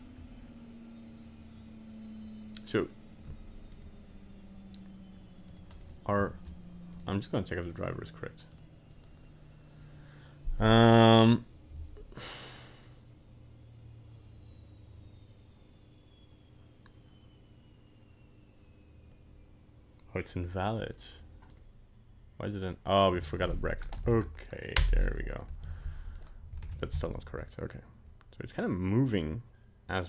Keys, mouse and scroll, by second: 3.7 right click, 5.5 right click, 5.8 right click, 6.9 right click, 7.7 right click, 26.2 right click, 26.6 ctrl+Tab, 26.8 right click, 27.1 g.